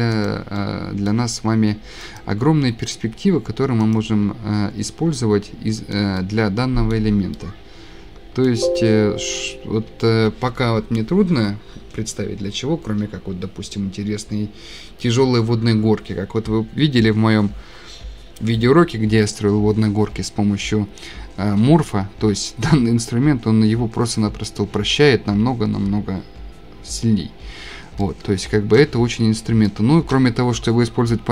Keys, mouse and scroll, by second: 0.3 click, 1.1 middle click, 2.2 click, 4.0 click, 4.5 middle click, 4.6-5.0 scroll, 5.5 scroll down 12, 5.7-6.0 scroll up 14, 7.3 shift+scroll, 8.4 shift+scroll, 13.4 shift+scroll, 21.7-22.2 scroll down 9, 23.6-24.2 scroll down 7, 24.8 scroll, 27.7 scroll, 28.3 scroll down 11, 28.4-28.8 shift+scroll, 28.7-29.8 typing, 30.1-30.4 shift+scroll.